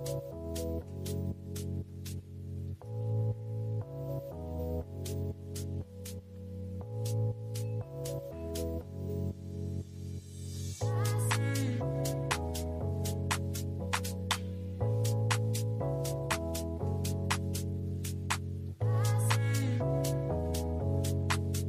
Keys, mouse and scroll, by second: 16.2 double click, 19.9-20.9 typing.